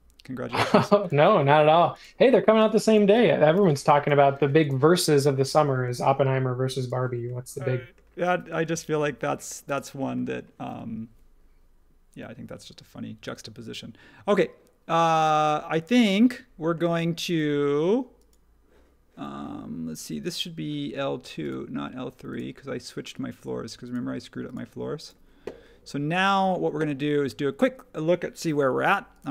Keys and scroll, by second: 2.6 space, 3.5 p, 4.3 space.